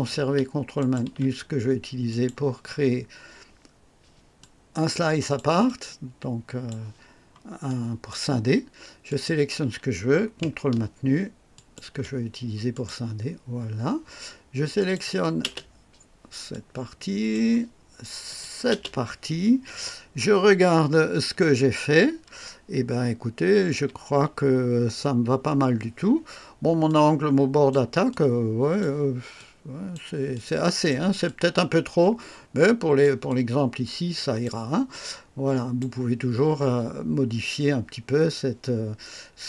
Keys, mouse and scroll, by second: 0.7 ctrl+click, 2.0 click, 4.3-5.5 drag, 5.6-6.9 drag, 7.6 right click, 9.0 click, 11.5 ctrl+click, 12.7 click, 14.7 click, 15.4 space, 16.5-17.5 drag, 18.2 click, 18.7 space, 21.1 KP_1, 24.4 KP_3, 26.3 scroll up 1, 26.8 click, 28.0 click, 29.3 click, 30.3 click, 31.2-33.2 drag, 33.2-34.6 drag, 34.9-35.9 drag.